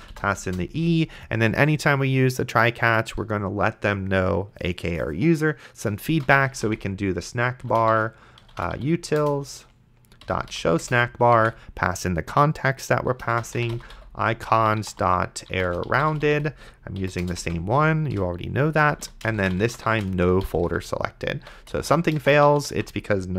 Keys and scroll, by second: 0.0-0.4 typing, 0.5 Return, 6.0-11.0 typing, 11.4 Tab, 13.2-16.8 typing, 17.0 Down, 17.2 Return, 17.4 Tab, 18.1-23.3 typing.